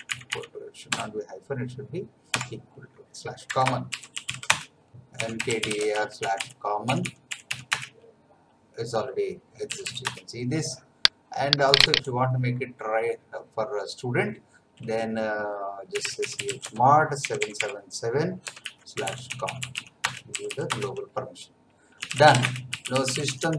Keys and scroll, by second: 0.9 Delete, 2.3 =, 3.5 Escape, 3.6-8.0 typing, 9.7 l, 10.0 Return, 15.7-17.2 typing, 18.4-20.3 typing, 20.6 Return, 21.7-23.5 typing.